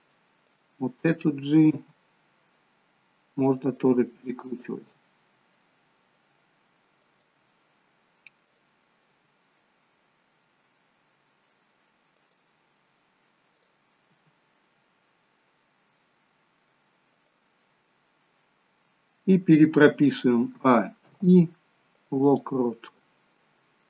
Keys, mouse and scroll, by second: 0.6 click, 2.2 g, 4.6 click, 4.9 g, 8.6 click, 9.5 g, 13.7 click, 14.2 g, 20.8 a, 21.2 i.